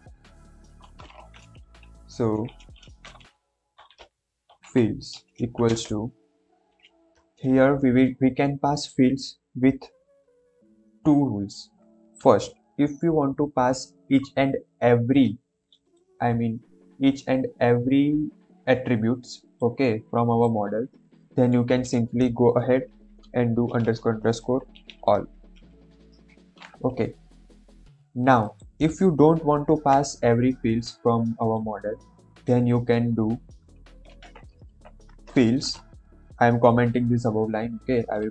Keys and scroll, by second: 1.0 BackSpace, 3.4-5.6 typing, 22.7-25.5 typing, 26.2 ctrl+s, 34.0 ctrl+/, 34.7 End, 35.0 Return.